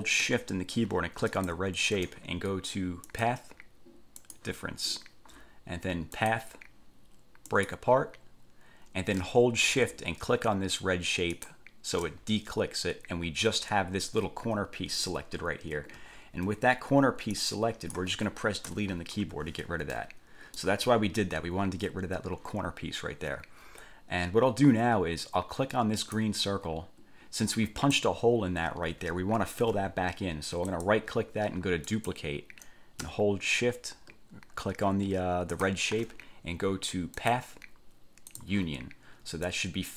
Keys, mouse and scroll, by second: 1.5 shift+click, 3.2 click, 4.4 click, 6.4 click, 7.6 click, 11.5 shift+click, 16.2-16.6 ctrl+scroll up 2, 17.5-18.3 drag, 18.8 Delete, 19.4 1, 20.1 click, 26.2 click, 27.6-28.3 drag, 29.8 ctrl+z, 30.8 click, 32.0 click, 35.7 shift+click, 37.3 click, 38.4 click, 39.6-39.9 drag.